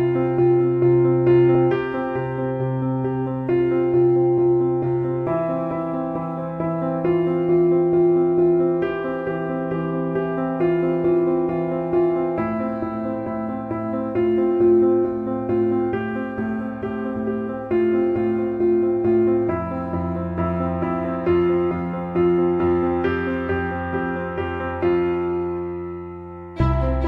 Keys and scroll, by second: 20.2 KP_3.